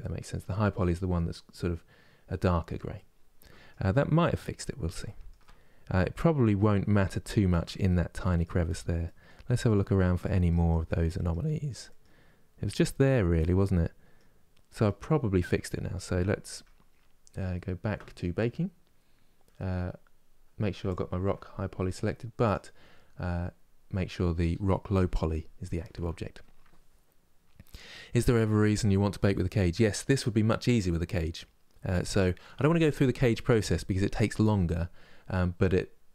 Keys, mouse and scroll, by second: 15.7 a, 16.2 Tab, 20.6 ctrl+click, 22.2 ctrl+click.